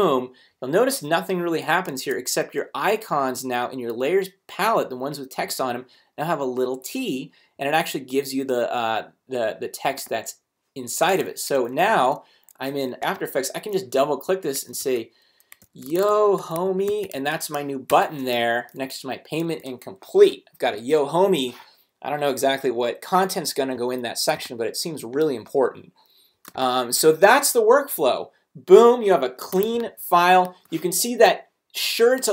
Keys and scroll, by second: 1.9 shift+super+a, 11.9 super+t, 14.8-17.6 typing, 17.9 shift+super+Return, 18.4 super+v, 19.2 v, 19.4 shift+super+a, 24.3 space, 26.5 space, 29.6 space.